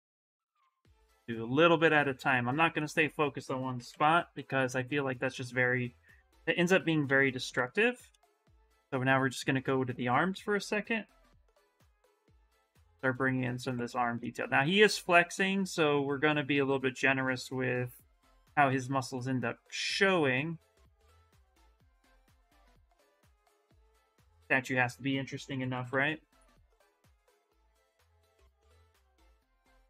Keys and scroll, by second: 3.3-4.6 typing, 6.8 ctrl+z, 7.3 ctrl+z, 13.0 s, 18.5 s, 25.0-26.5 typing, 28.3 ctrl+z, 28.5 ctrl+z, 28.7 s.